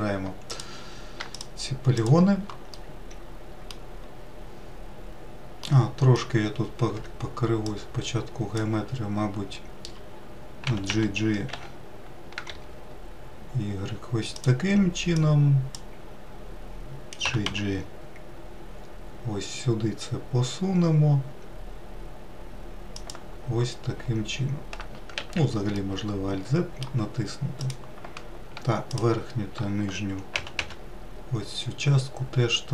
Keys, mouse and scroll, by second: 0.3 3, 1.1 click, 1.7 click, 2.5 shift+click, 3.2 shift+click, 3.9-5.1 middle drag, 5.7 middle click, 6.5 scroll up 1, 6.9 1, 7.6 click, 10.7 g, 15.1 click, 17.2 g, 25.2 alt+z, 25.8-27.6 middle drag, 27.6 click, 28.9-30.3 shift+drag, 30.3 g.